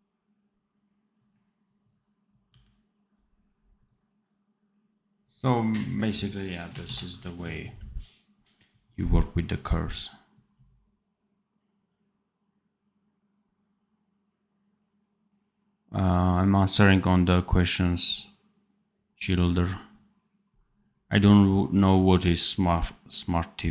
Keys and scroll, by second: 2.4 d, 6.8 ctrl+s.